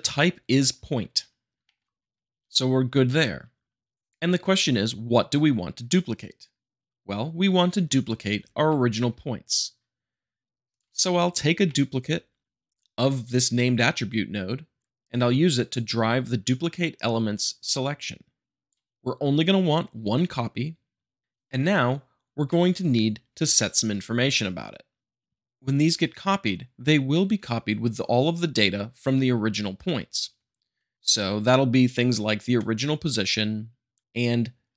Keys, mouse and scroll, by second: 1.6 shift+middle click, 3.9 click, 8.0 click, 8.6 shift+d, 11.2 middle click, 11.6-12.7 shift+middle drag, 14.9 Escape, 17.8-18.8 drag.